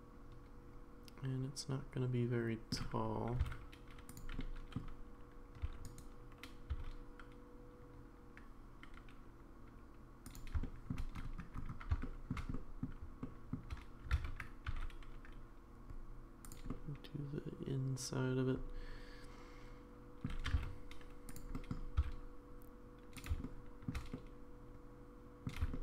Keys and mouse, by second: 3.3 g, 4.4 middle click, 5.8 e, 8.4 s, 10.6 shift+middle click, 12.0 shift+middle click, 12.5 middle click, 13.3 shift+middle click, 14.1 alt+z, 14.7 e, 16.7-20.3 middle drag, 20.5 g, 21.5 middle click, 22.1 s, 23.4 shift+middle click, 24.1-25.5 middle drag, 25.7 shift+middle click.